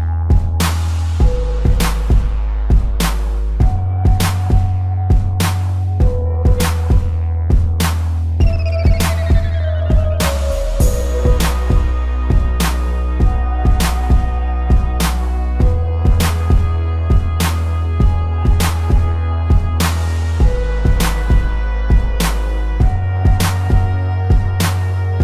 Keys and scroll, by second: 7.7 z, 9.0 a, 10.1 a, 11.0 space, 11.8 ctrl+-, 16.9 space, 19.0 ctrl+-, 19.2 ctrl+0, 20.6 z.